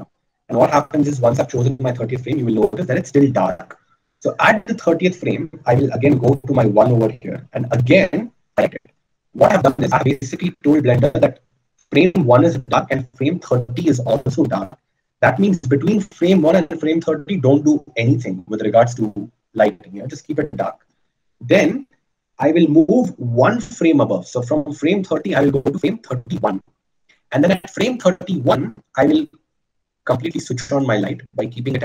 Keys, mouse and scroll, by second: 13.2 i.